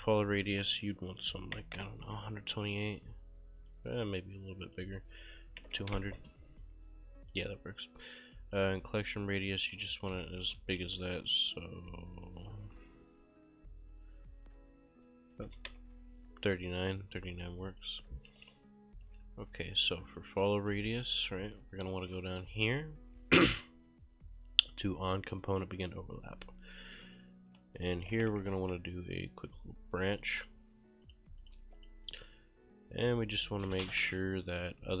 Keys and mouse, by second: 0.3 click, 0.9-2.1 typing, 2.7 click, 4.7 click, 5.3 2, 5.6 0, 5.9 Return, 6.7 click, 8.5 click, 9.5-11.0 typing, 9.7 right click, 11.2 click, 12.4 click, 15.1-16.0 typing, 17.8 click, 18.1-19.1 typing, 18.3 right click, 20.1 click, 25.8 click, 26.7 right click, 27.9 click, 27.9-29.1 typing, 29.2 click, 31.5 shift+click, 31.7 q, 31.8 click, 32.1 right click, 33.7 right click.